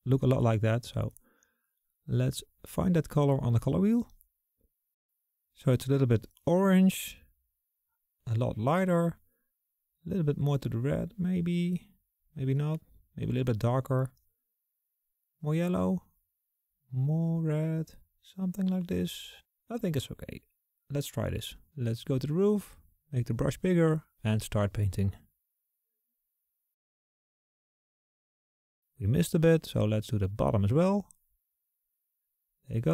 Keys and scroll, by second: 22.9-23.7 typing.